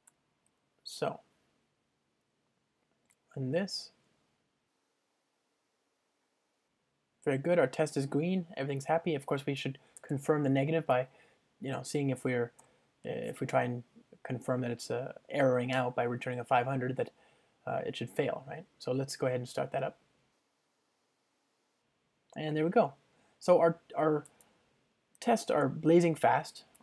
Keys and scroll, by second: 2.6 ctrl+shift+r, 12.7 Return, 17.5 ctrl+shift+r, 25.7 Return.